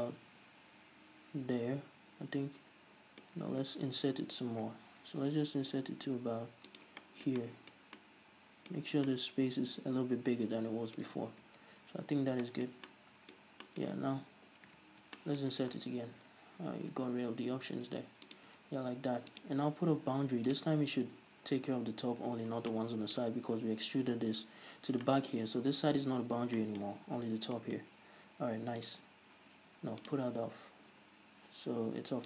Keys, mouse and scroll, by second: 0.0-6.9 middle drag, 3.8 ctrl+z, 4.8 i, 6.9 shift+click, 7.1-18.5 middle drag, 11.4 ctrl+z, 15.0 ctrl+z, 18.5 shift+click, 19.4 click, 20.7-21.1 drag, 25.1-29.1 shift+middle drag, 25.4-26.4 scroll up 2, 26.4 scroll up 1, 29.1-31.8 drag.